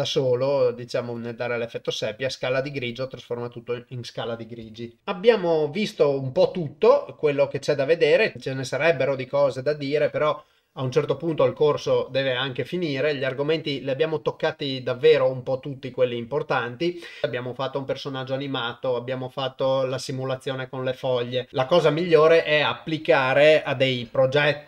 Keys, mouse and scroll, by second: 1.1-1.9 drag, 2.9 click, 5.0 ctrl+alt+shift+<, 7.8 click.